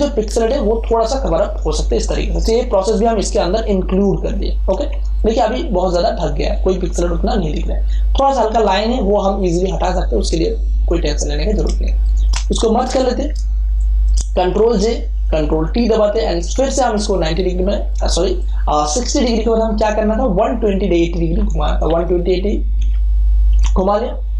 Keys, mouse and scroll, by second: 0.7 ], 1.9 Return, 4.8 space, 5.1-8.1 ctrl+drag, 11.7 space, 12.0 ctrl+click, 12.9 ctrl+e, 13.3 ctrl+space, 13.7 ctrl+click, 13.9 ctrl+space, 14.7 ctrl+j, 15.2 ctrl+t, 16.1-18.1 alt+drag, 18.1 space, 18.3-23.5 ctrl+drag, 21.8 1, 23.5 Return.